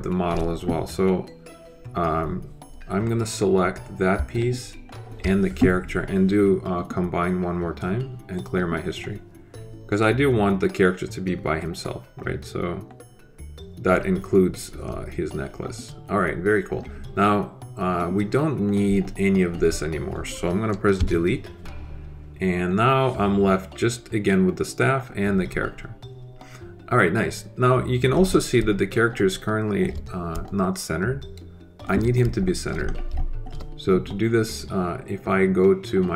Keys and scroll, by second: 20.9 Delete.